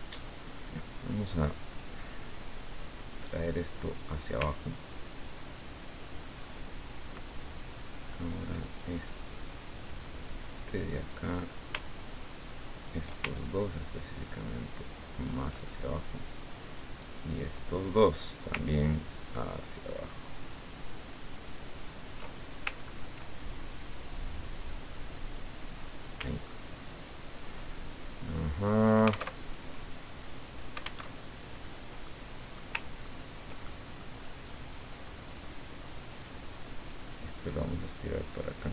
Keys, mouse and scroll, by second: 1.7 click, 4.4-7.3 ctrl+drag, 7.7 click, 8.4 click, 9.1 click, 10.2 click, 11.2 click, 12.7 shift+click, 13.3-15.4 ctrl+shift+drag, 15.9 ctrl+click, 17.0 click, 18.5-22.5 ctrl+drag, 22.7 ctrl+scroll up 1, 24.4 click, 24.9-26.3 drag, 26.5-27.3 ctrl+scroll down 6, 29.4 alt+Tab, 31.0 alt+Tab, 32.1 click, 32.9-33.2 ctrl+scroll up 2, 33.7 ctrl+click, 35.2 click, 37.0-38.7 drag.